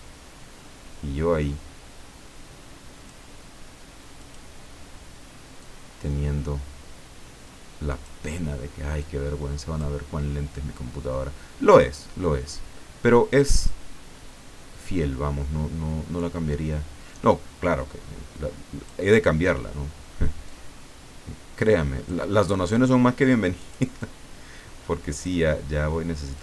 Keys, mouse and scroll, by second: 4.2 click, 5.6-8.2 drag, 9.0 click, 14.8-19.1 drag, 20.4-22.4 drag, 23.6 click, 24.0-25.4 drag, 26.3-26.4 drag.